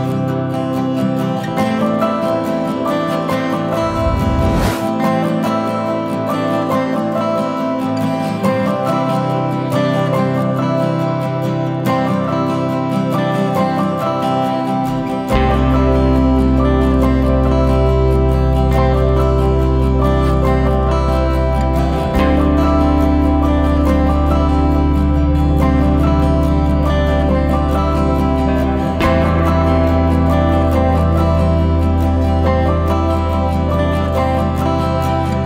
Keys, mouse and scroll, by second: 0.1 ctrl+m, 1.8 click, 6.3 click, 8.4 click, 9.2-9.6 scroll up 2, 9.6 alt+a, 10.5 l, 15.1 alt+a, 15.5 click, 15.7 click, 16.0-16.3 scroll down 1, 16.3-16.8 scroll up 2, 16.8 scroll down 1, 17.0 middle click, 17.8 scroll up 3, 18.0 shift+middle click, 18.7 scroll up 2, 19.2 alt+a, 20.3 click, 22.7 alt+a, 23.0 click, 23.4 click, 23.8 alt+a, 24.1 click, 24.7 click, 25.2 Tab, 25.4 scroll down 1, 25.6 alt+a, 25.9 KP_0, 26.5-27.0 scroll down 1, 27.6-30.1 shift+middle drag, 30.1 click, 30.4 scroll up 1, 30.6 Tab, 31.8 l, 34.4 Left.